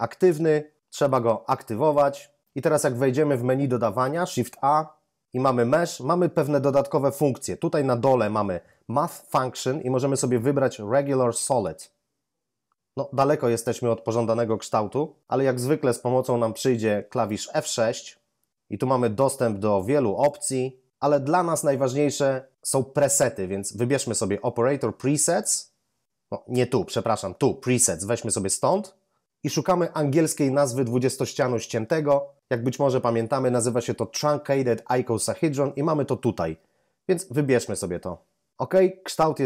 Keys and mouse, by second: 1.0 click, 4.6 shift+a, 11.6 click, 17.7 F6, 19.2 click, 25.2 click, 28.6 click, 37.6 click.